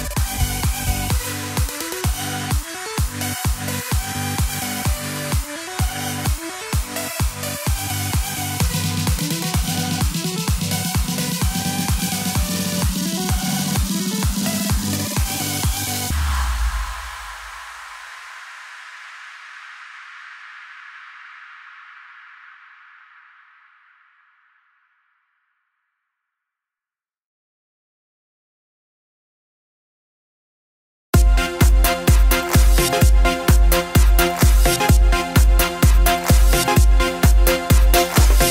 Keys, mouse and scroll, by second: 0.0-0.8 drag, 1.8-3.7 scroll down 1, 3.7 scroll up 1, 5.9-8.0 drag, 11.1 scroll down 2, 13.4 z, 14.2 click, 14.8 click, 15.6 z, 25.0 Left, 32.0 Left.